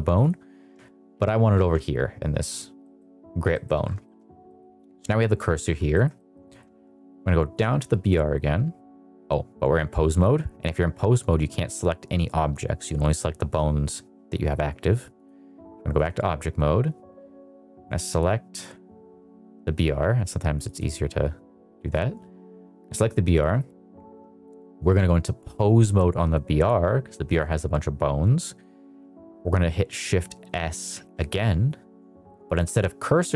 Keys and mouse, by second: 1.0 shift+s, 2.8 middle click, 3.4 middle drag, 3.9 shift+middle drag, 4.4 middle click, 5.8 shift+middle drag, 6.1 middle drag, 6.4 shift+middle drag, 7.5 click, 10.0 click, 15.1-16.0 drag, 17.9 click, 18.4 click, 20.6 click, 25.5-26.3 drag, 27.2 click, 30.8 shift+s.